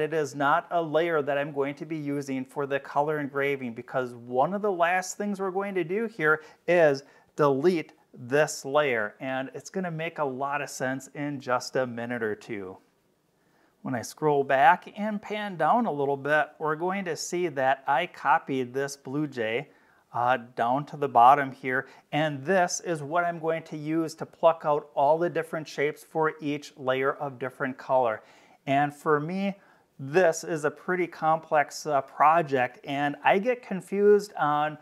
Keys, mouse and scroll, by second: 7.2 click, 13.5-14.2 scroll down 6, 14.6 space, 15.0-16.2 drag.